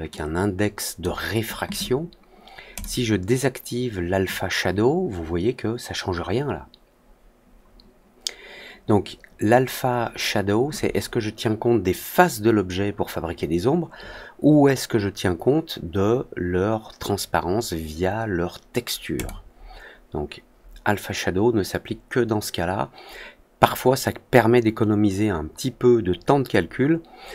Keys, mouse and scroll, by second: 0.1 click, 2.7 click, 19.1 click.